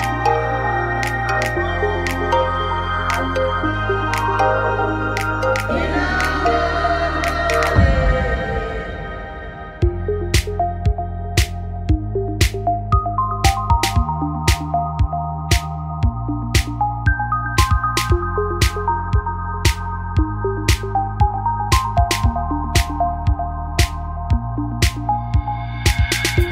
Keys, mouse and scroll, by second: 2.3 right click, 5.4 right click, 5.9 shift+d, 7.5 middle click, 8.6 x, 10.4-12.2 middle drag, 12.4 middle click, 13.3-14.6 right drag, 14.6 l, 15.4 p, 17.2 Tab, 17.8 click, 18.0 right click, 20.4 Tab, 21.1 a, 22.4 Tab, 23.7 shift+h.